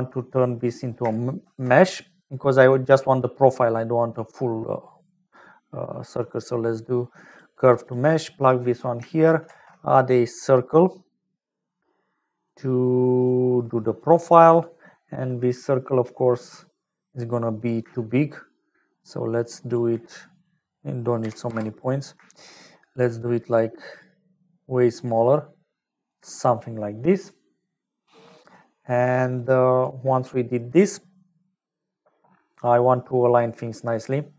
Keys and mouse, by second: 0.7 middle click, 1.3 shift+a, 8.6 click, 9.4 shift+a, 13.8 click, 19.3 shift+click, 20.3-26.1 drag, 28.6 middle click, 29.3 click, 31.3 middle click.